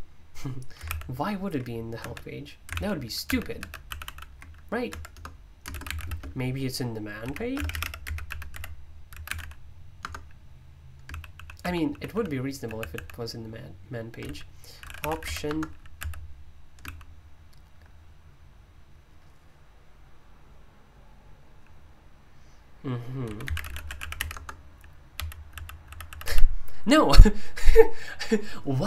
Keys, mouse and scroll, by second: 0.8 super+u, 2.0 Escape, 2.7 super+l, 3.2 super+h, 3.8 super+l, 4.9 Escape, 5.1 Return, 5.5-13.1 typing, 9.9 Return, 14.2-17.5 typing, 21.6 typing, 23.2-26.0 typing.